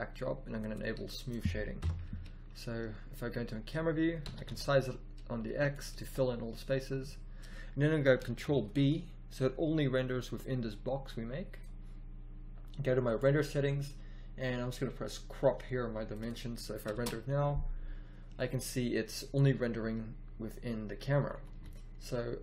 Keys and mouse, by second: 1.8 KP_0, 4.2 s, 8.5 ctrl+b, 16.9 shift+z, 21.4 a, 21.5 a.